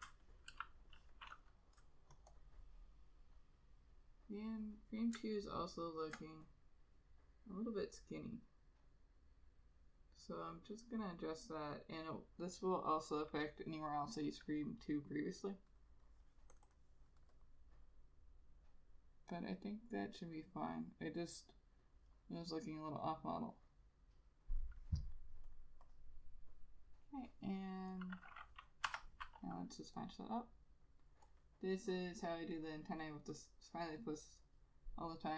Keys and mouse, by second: 5.5 alt+click, 13.3 double click, 30.2 F6.